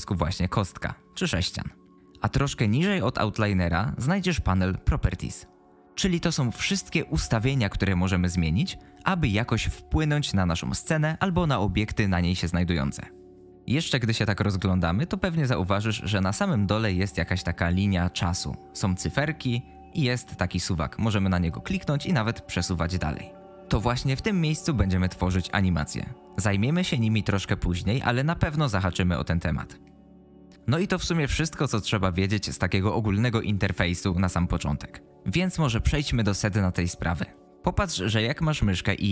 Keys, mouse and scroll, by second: 21.5-23.5 drag.